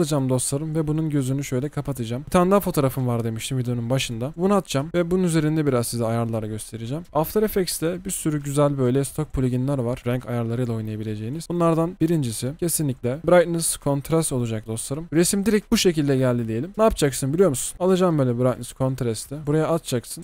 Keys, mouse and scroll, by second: 17.7-18.0 typing.